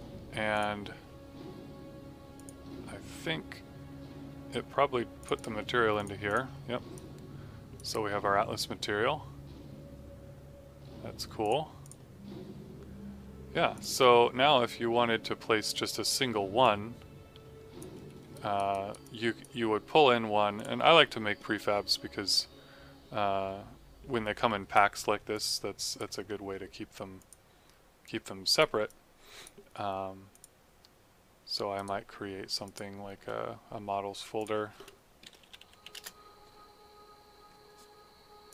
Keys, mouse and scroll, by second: 7.1 click, 11.3 click, 16.5 click, 17.9 f, 18.2 alt+right click, 18.9 alt+click, 20.5 click, 21.8 click, 25.2 click, 26.2 alt+middle click, 27.1 click, 28.8 alt+click, 30.2 click, 31.7 right click, 32.6 click, 35.0-36.3 typing, 38.4 click.